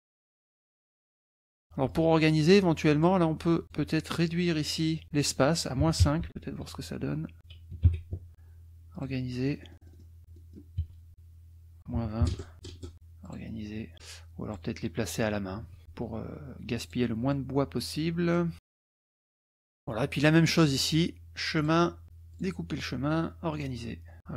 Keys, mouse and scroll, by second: 0.3 click, 0.9-1.3 drag, 1.9-3.2 drag, 3.6 shift+click, 5.2 click, 5.8 KP_Subtract, 6.0 KP_5, 6.2 Tab, 6.5 KP_Subtract, 7.4 click, 7.8 KP_Subtract, 8.0 KP_5, 8.9 click, 9.5-10.8 drag, 10.8 KP_Subtract, 11.1 click, 11.8 click, 11.9 KP_Subtract, 12.2 KP_2, 12.3 KP_0, 12.5 Tab, 12.7 KP_2, 13.3 click, 14.0 click, 15.6 KP_Subtract, 15.8 ctrl+middle drag, 16.8 click, 17.3 click, 18.4-20.0 drag, 20.2 click, 21.6 click, 22.3 click, 23.6 drag.